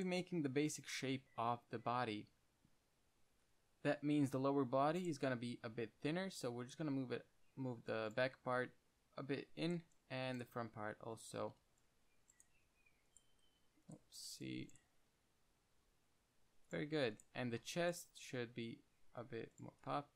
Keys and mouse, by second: 0.3-2.1 drag, 4.4 c, 5.5 g, 7.0-8.4 drag, 7.1 g, 10.1-15.9 typing, 12.5 click, 13.3 click, 14.3 click, 14.6-15.0 drag, 17.7 z, 17.9 c, 18.4 z, 19.3 click, 20.0 g.